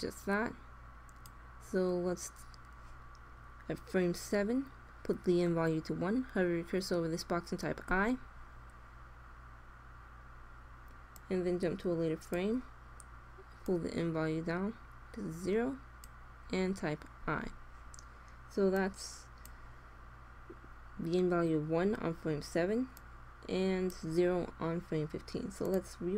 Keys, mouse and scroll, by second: 7.9 i, 11.1-12.7 drag, 13.6-15.2 drag, 15.4 click, 17.2 i, 18.7-20.4 drag, 22.9-24.6 drag, 25.5-26.1 drag.